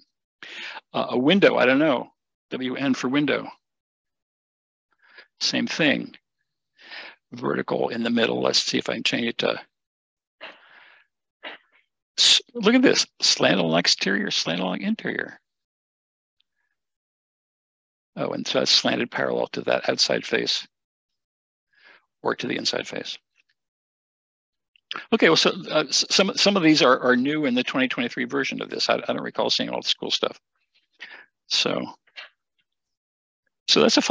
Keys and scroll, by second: 2.6-3.0 typing, 4.7-5.0 typing.